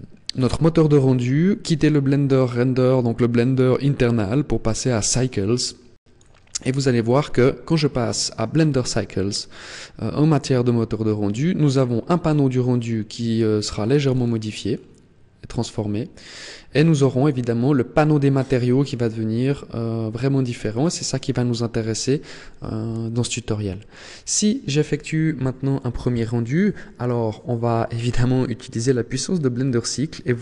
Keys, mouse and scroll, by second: 12.4-13.1 scroll down 5, 13.7-14.8 scroll up 7, 16.9 click, 20.3 click, 25.4-26.2 scroll up 1, 26.2-26.6 scroll down 1.